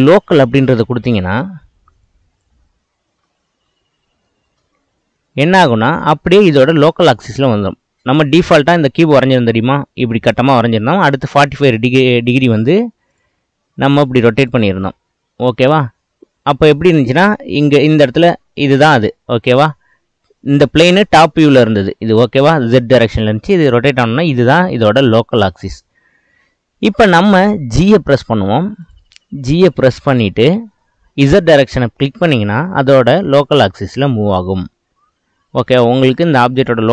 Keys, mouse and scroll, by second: 4.3-7.3 middle drag, 8.1 click, 13.1-17.9 drag, 28.8-29.7 drag, 29.7-30.7 middle drag, 30.7 g, 36.3-36.9 middle drag.